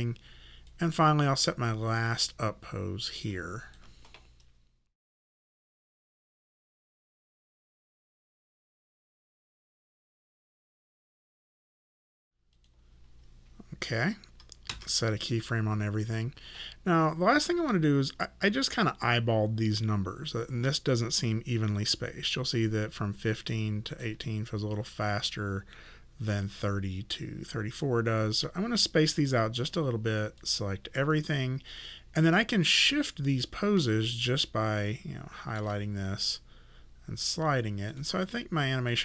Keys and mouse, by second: 0.7 click, 5.0 click, 6.4 click, 6.5 middle click, 6.8 click, 7.9 click, 8.4 w, 8.6 click, 9.1 click, 9.5 e, 9.5 click, 10.6 click, 11.0 middle click, 11.4 click, 11.6 middle click, 12.5 click, 14.7 s, 22.6 click, 26.3 click, 30.4 click, 34.2 shift+middle click, 36.2 click.